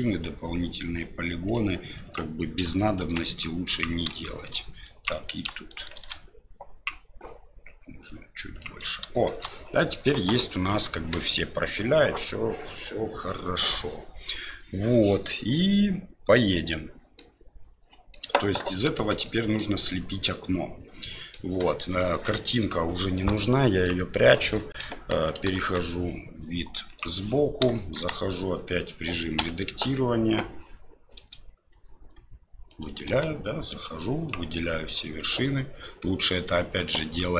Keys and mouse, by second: 2.1 click, 3.0 ctrl+shift+b, 4.2 shift+click, 4.9 click, 5.9 ctrl+shift+b, 9.3 shift+middle click, 17.3 middle click, 19.0 Tab, 19.2-19.6 middle drag, 20.3-21.3 middle drag, 21.9 right click, 23.8 click, 24.8 KP_1, 25.4 KP_3, 26.8 click, 27.7 shift+middle drag, 31.1 Tab, 32.7 right click, 33.1 Tab, 34.1 click.